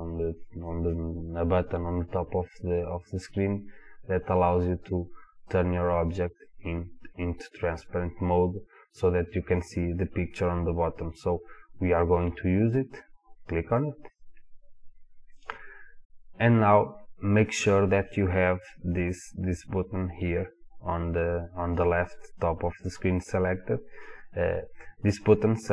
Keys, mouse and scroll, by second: 4.9 click, 6.4-8.4 drag, 12.0 click, 12.6 click, 14.2 click.